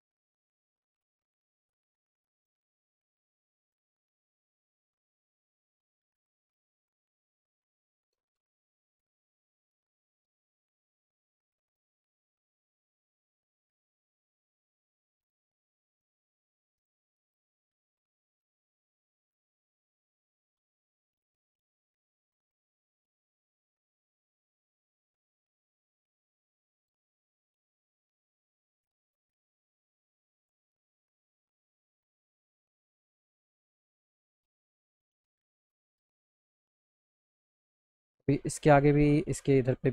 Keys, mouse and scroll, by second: 0.6-2.3 drag, 3.6 click, 6.0-7.9 shift+drag, 8.4 ctrl+z, 9.0 click, 11.4 shift+click, 13.8 shift+click, 15.3 click, 18.1 alt+middle click, 19.4 alt+middle click, 20.3 alt+middle click, 22.3 alt+middle click, 23.3 click, 24.5 alt+middle click, 25.8-27.0 drag, 27.2 alt+middle click, 30.3-31.3 drag, 34.3 click, 35.9 alt+middle click, 36.5 middle click.